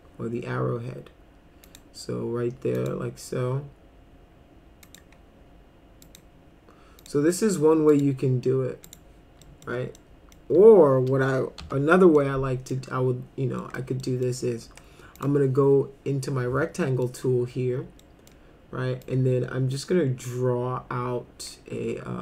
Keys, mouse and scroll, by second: 1.6 click, 2.8 click, 4.8 click, 6.0 click, 7.0 click, 7.9 click, 8.2 F4, 8.9 right click, 9.4 middle click, 10.0 middle click, 11.6 Delete, 12.2 middle click, 13.6 middle click, 14.0 middle drag, 15.2 click, 16.8 middle click, 18.0 middle click, 19.0-22.2 drag.